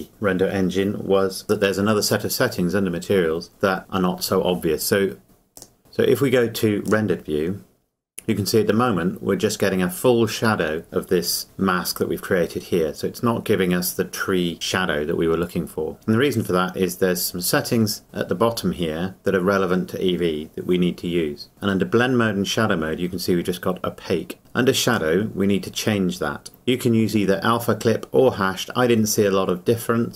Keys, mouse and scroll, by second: 1.4 scroll up 1, 5.2 click, 5.8-6.9 scroll down 1, 6.9 click, 8.4-9.0 scroll down 1, 12.9-14.6 scroll up 1, 16.5-17.1 scroll down 1, 24.9 click.